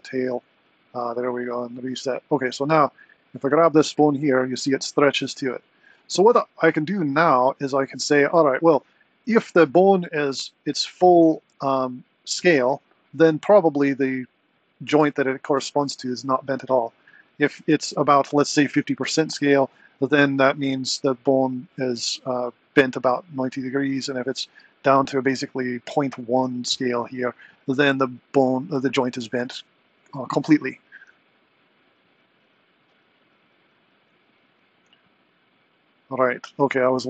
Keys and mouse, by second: 3.1 click, 3.6 r, 11.5 r.